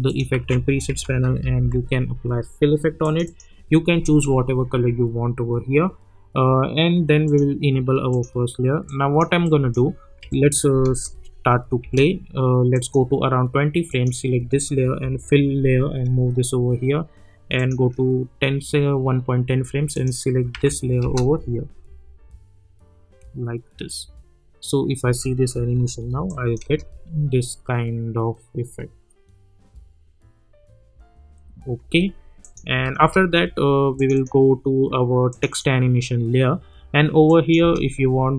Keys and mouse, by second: 0.3 ctrl+a, 0.6-2.1 typing, 3.0 click, 7.7 click, 10.2 =, 10.8 space, 12.7 click, 15.0 [, 17.5 click, 19.9 click, 20.5 [, 21.0 space, 25.0-26.6 typing, 26.3 click, 31.8 space, 32.4 click, 32.7 space, 33.9 click, 37.6 space.